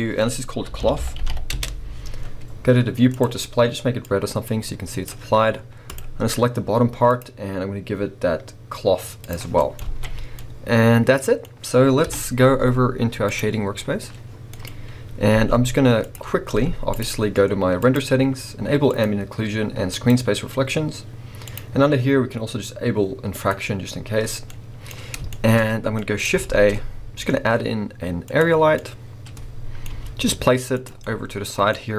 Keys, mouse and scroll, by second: 1.6 Return, 5.9 click, 7.1-9.6 drag, 9.6-13.7 middle drag, 9.9 alt+a, 10.1 scroll down 2, 12.1 KP_0, 13.7 click, 14.3 scroll down 1, 14.5-17.0 middle drag, 14.9-15.5 scroll up 1, 17.0 z, 18.9 click, 19.9-24.5 drag, 24.5-31.9 middle drag, 24.9-25.3 scroll up 2, 25.7 scroll down 2, 28.4 shift+a, 28.6 scroll down 2, 29.9 g.